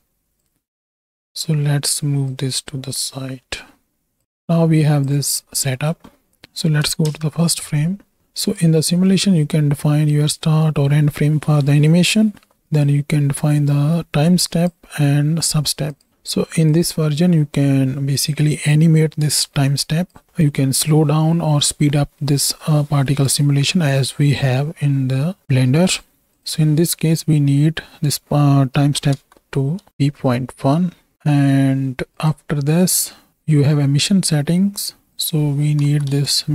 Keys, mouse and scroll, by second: 0.7 click, 1.4 middle click, 2.2-4.2 drag, 5.7 middle click, 7.0 shift+Left, 8.3 click, 8.9 middle click, 12.9-16.0 drag, 16.7-25.8 drag, 26.3-29.9 drag, 32.1 click, 32.8 middle click, 35.1-36.1 drag.